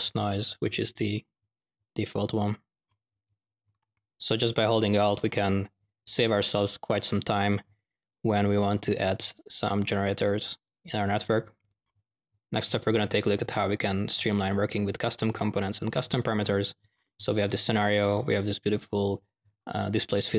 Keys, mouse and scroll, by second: 0.9 ctrl+z, 3.9 ctrl+alt+-, 10.6-11.7 drag, 18.1-18.6 drag.